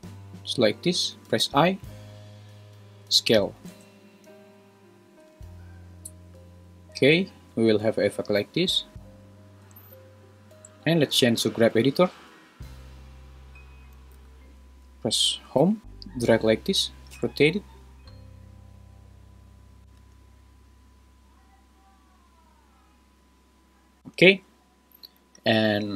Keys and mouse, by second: 0.7 click, 1.4 i, 3.7 space, 6.3 middle click, 6.8 middle click, 8.4 right click, 9.7 space, 12.1-13.2 drag, 14.1 a, 15.6 Home, 15.8 click, 16.1-16.5 drag, 17.1 r, 20.0 space, 24.0 space, 24.1 space.